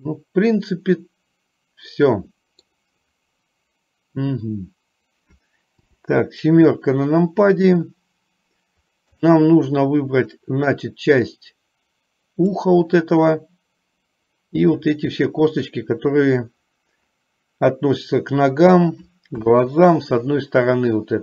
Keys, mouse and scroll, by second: 5.9 KP_7, 9.2 click, 10.6-12.7 drag, 19.5 KP_1.